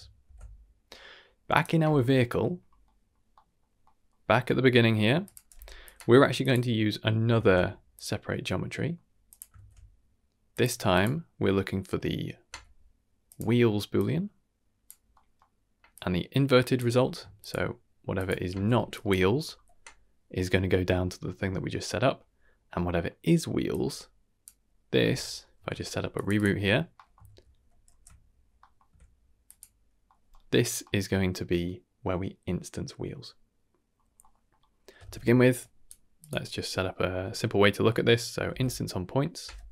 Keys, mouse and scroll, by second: 0.2 ctrl+s, 1.5 click, 2.3 middle click, 2.6-3.1 scroll down 2, 2.8 middle click, 3.3 middle click, 3.8 middle click, 4.3 middle click, 4.7-5.2 scroll up 2, 5.2 click, 5.5 g, 6.4 click, 7.3 shift+d, 8.6 middle click, 9.2 click, 9.5 shift+d, 10.9-12.4 drag, 13.9-14.8 drag, 15.1 middle click, 15.9-16.7 drag, 17.0 scroll down 1, 17.4 ctrl+shift+click, 18.1 ctrl+shift+click, 18.9 drag, 19.4 x, 20.8 scroll down 2, 21.0 middle click, 21.8 middle click, 22.3 scroll up 1, 23.7-26.2 drag, 26.3 drag, 26.9 middle click, 27.6 ctrl+b, 27.8 ctrl+g, 28.5 middle click, 29.4 click, 30.0 middle drag, 30.5 scroll up 1, 30.8 middle click, 31.3-32.6 scroll down 2, 33.9 scroll up 2, 34.2 middle click, 34.6-34.9 scroll up 2, 35.0 shift+a.